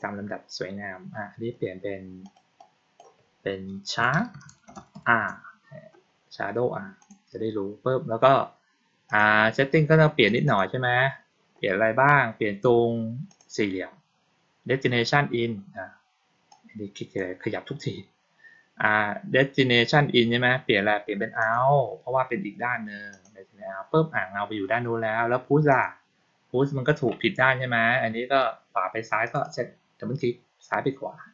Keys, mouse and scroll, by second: 2.1 click, 2.5 click, 6.9 click, 9.0 click, 10.2 click, 10.4 click, 13.2 click, 16.4-17.1 drag, 21.3 click, 23.0 click, 25.6 click, 29.2 click, 29.3 click.